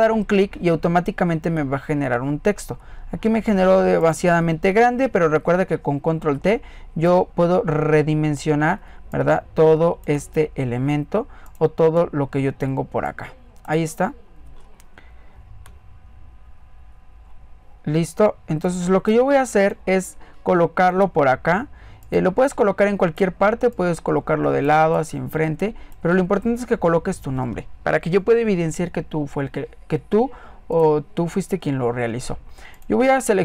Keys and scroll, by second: 4.8 ctrl+alt+t.